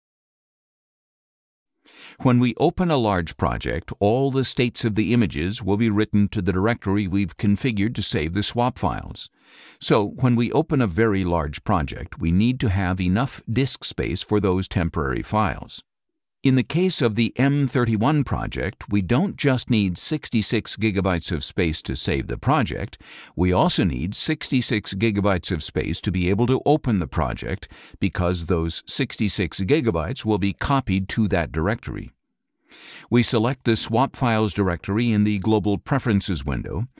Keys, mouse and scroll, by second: 1.5 click, 3.3 click, 4.8 click, 6.2 click, 32.0 click, 32.6 click, 36.3 click.